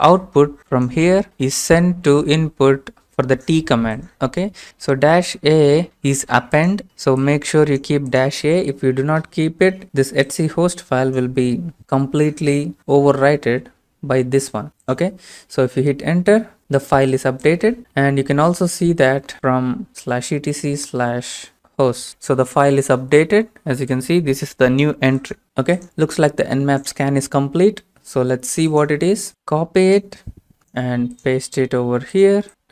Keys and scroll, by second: 15.4 Return, 18.2-21.5 typing, 22.0 Right, 32.5 Return, 32.5 ctrl+v, 32.5 alt+Tab.